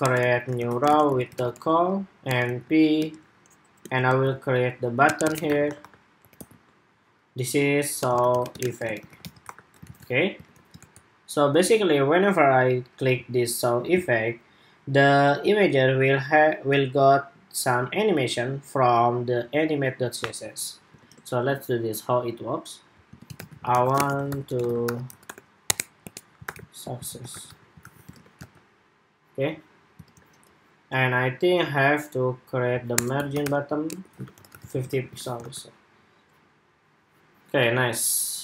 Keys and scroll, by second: 9.7 super+s, 10.2 super+Tab, 10.5 super+r, 20.8 super+Tab, 27.5 super+s, 27.9 super+Tab, 28.1 super+r, 29.8 super+Tab, 34.6 super+s, 34.9 super+Tab, 35.2 super+r, 37.5 super+Tab.